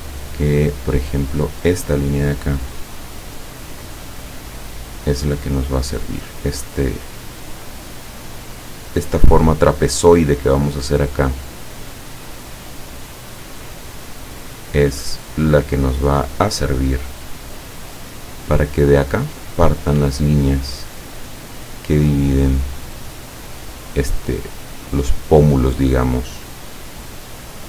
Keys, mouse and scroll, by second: 3.9 click, 6.4 click, 12.1 click, 15.9 click, 20.1 click, 24.4-26.5 drag.